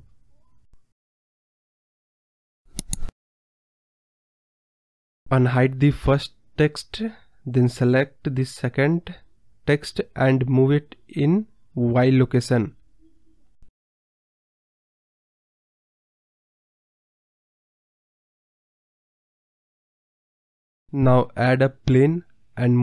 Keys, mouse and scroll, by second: 0.7-1.2 scroll down 5, 1.2-2.4 drag, 2.4-3.0 middle drag, 3.0 click, 3.3-4.3 middle drag, 4.4 click, 5.1 middle click, 5.8 click, 6.1-6.6 middle drag, 6.6 scroll down 1, 6.8-7.9 middle drag, 7.9 click, 8.6-9.2 scroll up 1, 9.8 click, 10.9-12.7 drag, 12.7-13.1 middle drag, 13.1 scroll up 1, 13.3-14.3 middle drag, 14.4 click, 15.1-15.6 middle drag, 15.6 click, 15.8-16.2 middle drag, 16.2 scroll up 2, 16.3-17.3 middle drag, 17.3 click, 17.5-18.0 middle drag, 18.0 scroll down 2, 18.1-19.7 middle drag, 19.7 KP_1, 20.2 scroll up 1, 20.2-21.2 middle drag, 22.6 KP_1.